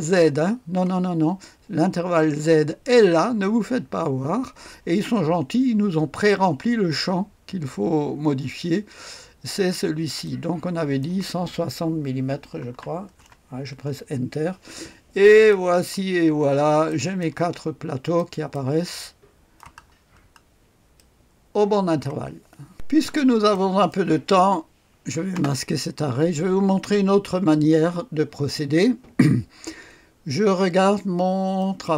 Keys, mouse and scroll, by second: 10.2 click, 12.2 KP_1, 12.7 KP_6, 13.1 KP_0, 13.8 Return, 14.8-15.5 scroll down 1, 15.5 click, 16.2-16.9 scroll up 1, 17.5-18.6 scroll up 1, 18.2 right click, 19.0 middle click, 19.8-21.0 scroll down 1, 21.0-22.0 middle drag, 23.1-23.9 scroll up 1, 23.9 right click, 25.3 space, 27.5-29.3 drag, 31.6 click.